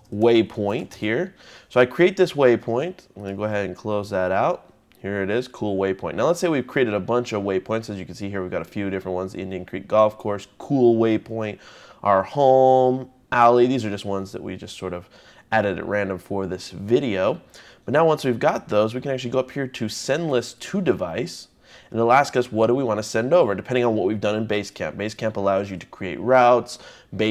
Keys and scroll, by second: 0.0-1.3 typing.